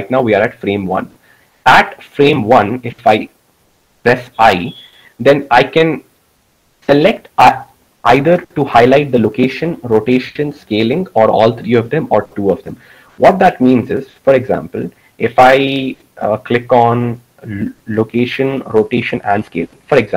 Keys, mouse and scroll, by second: 5.0 i.